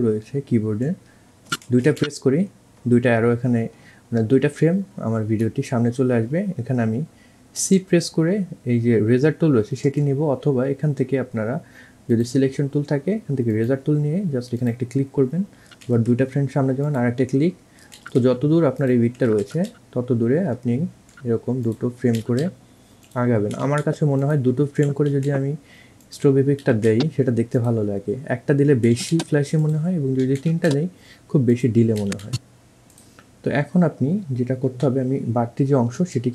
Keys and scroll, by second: 4.3 Right, 18.5 Right, 20.5 Right, 21.8 Right, 22.3 Right, 23.7 Left, 24.7 Right, 24.9 Right, 26.1 Right, 26.4 Right, 27.4 Right, 29.2 Right, 29.5 Right, 31.5 Right, 33.3 Right, 34.8 Delete, 36.1 v.